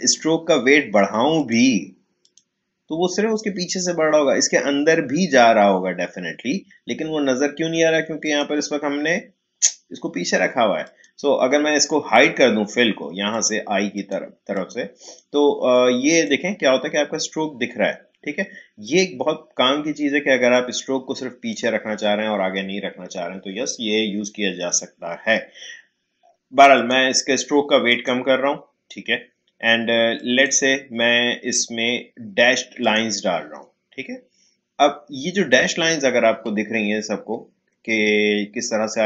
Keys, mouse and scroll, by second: 0.0 click, 8.2 click, 10.8 click, 13.3 click, 18.8-24.1 drag, 26.7 click, 32.8 click, 35.0-36.4 scroll up 1, 37.1 alt+scroll up 1.